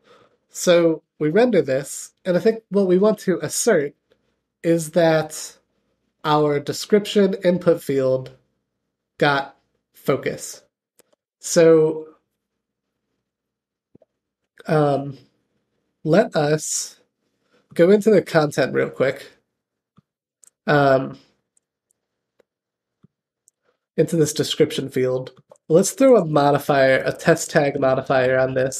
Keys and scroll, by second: 19.7 super+b.